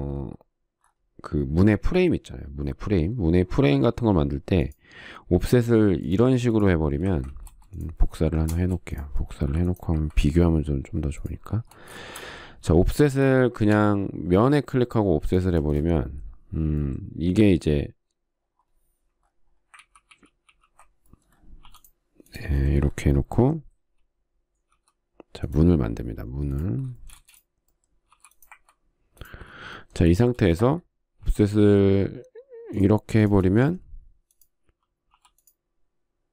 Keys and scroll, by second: 6.3 f, 7.8 ctrl+z, 9.2 space, 10.1 m, 12.4 space, 14.4 f, 16.2 space, 20.5 ctrl+z, 22.3 p, 25.4 r, 27.8 space, 28.8 m, 31.0 space, 31.9 f, 34.1 space, 35.8 p.